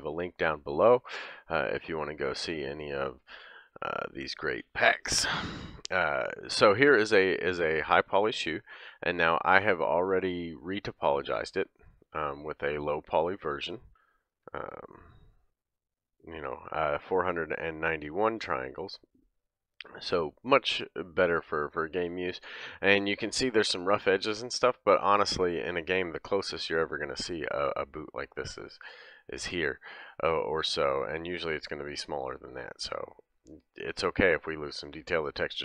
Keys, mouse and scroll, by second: 0.0-10.3 drag, 10.3 middle click, 11.1 click, 11.2-14.2 middle drag, 13.9 Tab, 14.2 click, 14.3-34.0 middle drag, 14.5 Tab, 18.2 Tab, 24.2-24.9 scroll down 2, 24.9-25.3 scroll down 1, 25.9 scroll up 1, 26.5-27.0 scroll down 2, 29.0 scroll down 1, 29.2-30.3 scroll up 2, 30.3-31.2 scroll down 1, 31.2-31.9 scroll down 2, 33.4-34.0 scroll up 1, 34.2-34.9 scroll up 3.